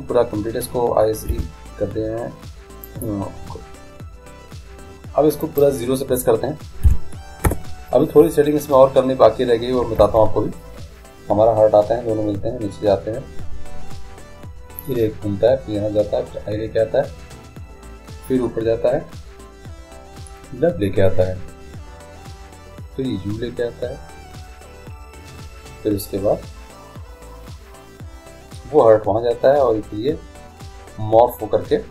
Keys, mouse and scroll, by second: 1.9 i, 5.7-7.4 drag, 10.1 alt+a.